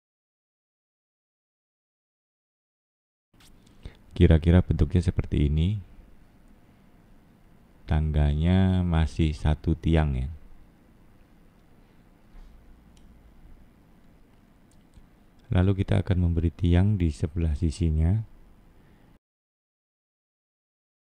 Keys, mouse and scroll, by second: 0.4 click, 1.7 middle click, 4.0 click, 5.3 click, 5.8 middle click, 9.6-10.2 scroll down 2, 10.2 middle click, 12.8-13.3 scroll down 3, 13.7 middle click, 15.3 middle click, 17.7 scroll up 2, 19.3 click, 20.7 middle click.